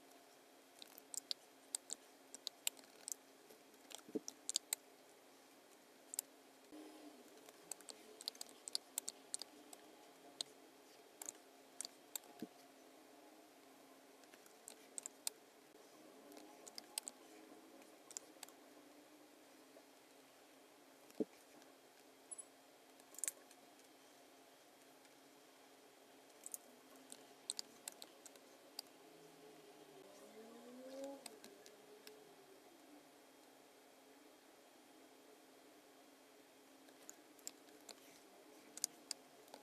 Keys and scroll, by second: 1.2 space, 2.4 space, 2.8 super+=, 4.0 alt+b, 4.5 space, 5.9 space, 7.4-10.3 typing, 11.8 space, 12.3 v, 15.0 space, 16.7 space, 18.1 space, 21.1 v, 21.9 v, 27.5 space, 28.2 t, 28.3 space, 31.0 space, 31.4 v, 32.0 v, 37.4 v, 38.8 space.